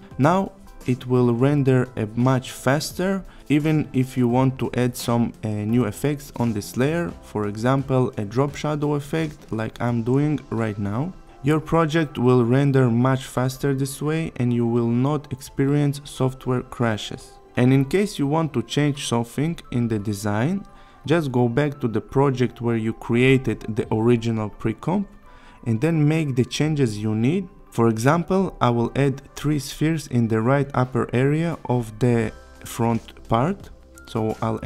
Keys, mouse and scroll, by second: 0.4 click, 3.0-3.9 typing, 3.8-4.4 click, 7.2-7.7 click, 14.6 n, 15.0 space, 20.5 space, 22.2-23.1 click, 25.3 click, 29.5 click, 31.3 scroll up 1, 31.9 click, 32.8 click, 33.3-33.9 shift+click, 34.6 click.